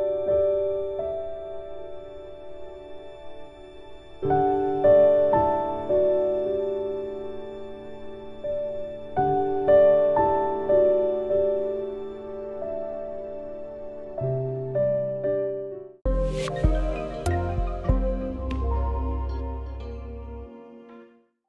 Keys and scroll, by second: 3.2 ctrl+z.